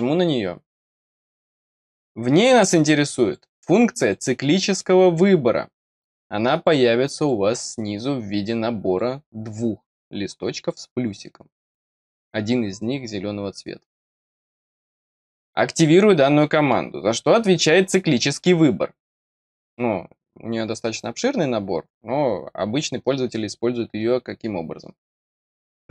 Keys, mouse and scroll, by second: 0.9 click, 2.7 click, 3.2 click, 3.6 click, 4.0 click, 4.6 click, 5.1 click, 6.0 click, 6.5 click, 7.1 click, 7.6 click, 8.8 click, 10.5 click, 13.9 click, 14.2 click, 15.7 click, 16.4 middle click, 25.1 click.